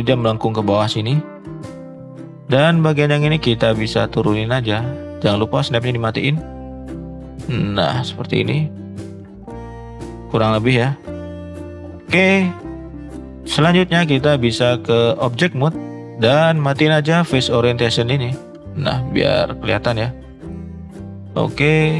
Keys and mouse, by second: 1.5 shift+middle click, 2.8 shift+click, 3.4 click, 4.4 ctrl+z, 5.6 click, 6.4 click, 8.2-9.9 middle drag, 10.2-10.6 middle drag, 10.7-12.4 middle drag, 12.9 middle click, 14.2-15.4 drag, 15.7 middle click, 17.0-18.7 drag, 18.8 middle drag, 19.7-20.2 middle drag, 20.7 middle click, 21.0 middle drag.